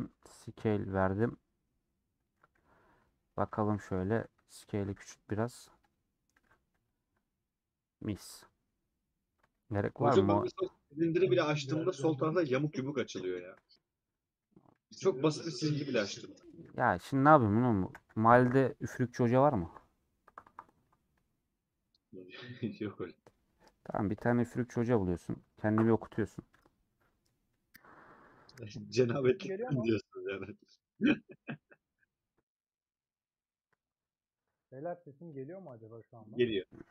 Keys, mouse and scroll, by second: 2.8 /, 3.3 scroll down 1, 3.4-4.9 middle drag, 4.9 s, 7.4-7.7 scroll down 3, 8.6-12.1 middle drag, 12.1-12.5 scroll down 2, 12.6-14.8 middle drag, 14.8 scroll down 2, 15.0-16.5 middle drag, 16.5 scroll up 1, 16.9 Tab, 35.4 shift+middle click, 35.9 click, 36.3 middle click.